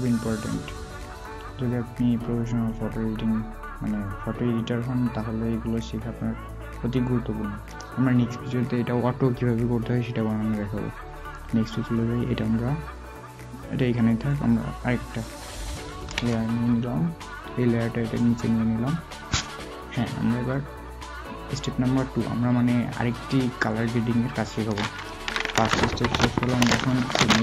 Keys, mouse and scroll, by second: 0.9 alt+scroll down 1, 2.6-3.1 alt+scroll down 1, 4.6 alt+scroll up 1, 6.9 alt+scroll, 6.9-7.2 alt+scroll down 1, 15.5 alt+w.